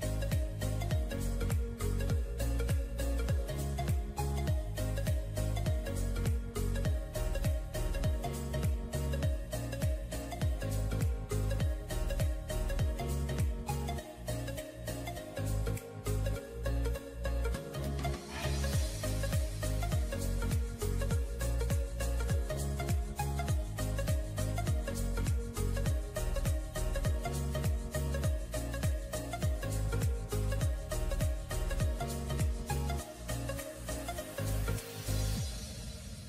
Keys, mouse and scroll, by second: 2.1 alt+click, 2.2-2.9 alt+scroll down 1, 3.0 alt+scroll down 1, 10.5 shift+click, 11.2 e, 11.9 right click, 13.2 right click.